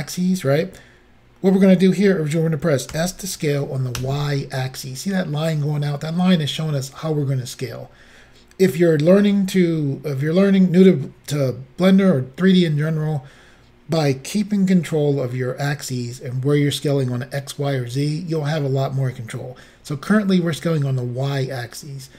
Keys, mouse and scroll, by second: 3.0 s, 4.0 y.